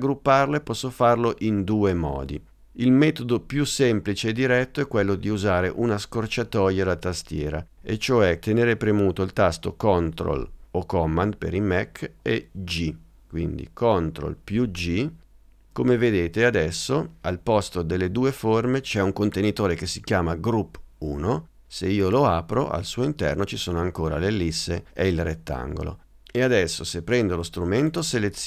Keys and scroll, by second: 14.6 super+g.